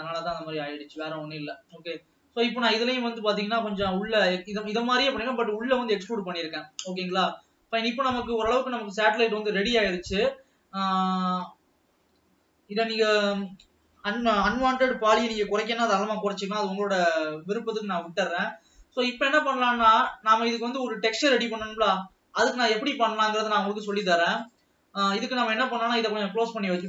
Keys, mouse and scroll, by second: 1.1 click, 3.2-3.9 scroll up 4, 5.4 scroll up 2, 7.2-8.8 scroll down 6, 8.8-9.1 scroll up 2, 10.5-10.9 scroll up 2, 12.0 alt+a, 13.4 l, 16.4 alt+a, 16.7-17.5 scroll down 5, 18.0 ctrl+s, 18.7-19.2 scroll down 2, 19.6 click, 24.0-25.2 drag, 26.1 ctrl+s.